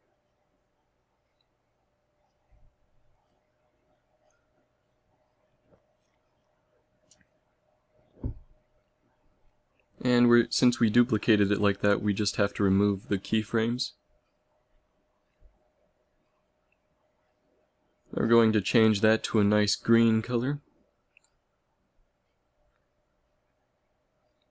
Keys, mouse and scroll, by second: 8.7 a, 11.5 a, 11.8 a, 12.0 b, 14.0 x.